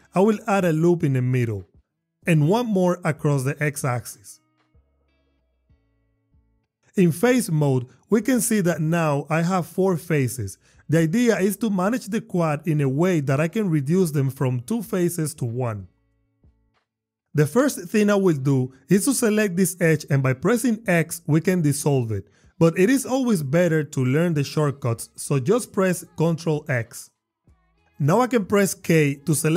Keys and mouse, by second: 1.2 click, 2.9 ctrl+r, 3.9 click, 4.8 click, 6.3 Tab, 6.7 Tab, 8.6 click, 9.0 click, 10.3 click, 12.0 click, 15.4 Tab, 16.7 Tab, 20.7 x, 23.4 click, 24.2 click, 24.9 alt+x, 26.6 ctrl+x, 28.1 k.